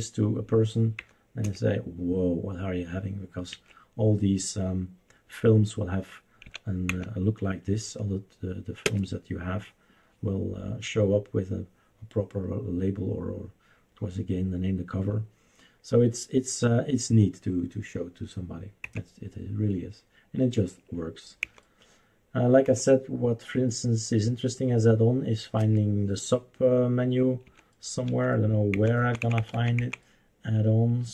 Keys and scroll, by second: 1.0 Down, 1.4 Return, 3.5 Escape, 6.4 Right, 6.9 Down, 8.8 Return, 18.8 Down, 18.9 End, 19.0 Down, 21.4 Down, 21.5 End, 21.6 Down, 22.7 End, 23.0 Down, 25.6 Return, 27.4 Right, 28.1 Left, 28.7 Down, 29.0 Down, 29.2 Down, 29.4 Down, 29.5 Down, 30.0 Down.